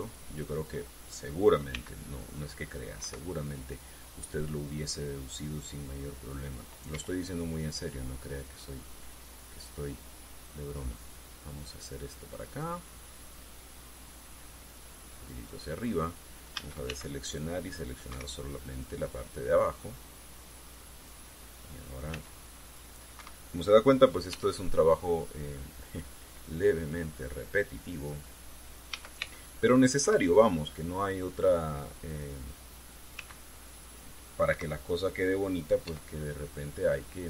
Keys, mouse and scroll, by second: 2.5 c, 2.8 click, 3.8 Escape, 7.6 e, 11.4 click, 13.3-16.4 drag, 17.3 a, 17.6 c, 18.0 click, 18.8 Escape, 19.4-22.0 drag, 22.8 c, 23.2 click, 23.9 Escape, 25.0 e, 26.6 click, 27.6-29.0 drag, 29.6 a, 29.9 c, 30.2 click, 30.8 Escape, 31.2-33.0 drag, 33.9 c, 34.4 click, 35.2 Escape, 36.6 e.